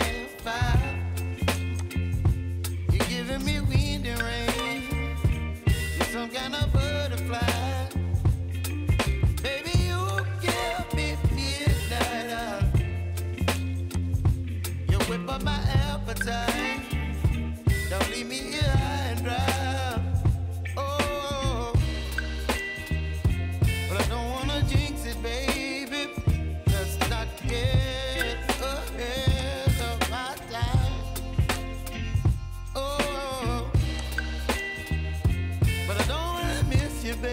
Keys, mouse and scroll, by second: 1.8-14.8 drag, 14.8-19.6 middle drag, 19.6-20.6 drag, 20.6-23.7 middle drag, 27.5 click, 29.4 click, 30.2-31.5 middle drag, 33.7 middle click, 34.0 click, 36.0-36.9 right drag, 36.9 click.